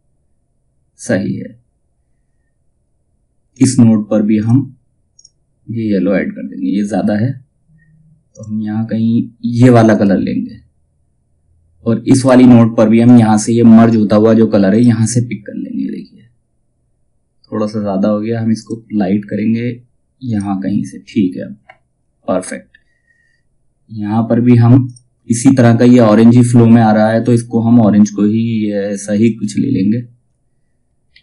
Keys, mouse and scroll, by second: 1.2 typing, 3.0 click, 7.8 click, 11.7 click, 18.1 click, 21.0 typing, 24.4 click, 26.7 click, 30.6 ctrl+z.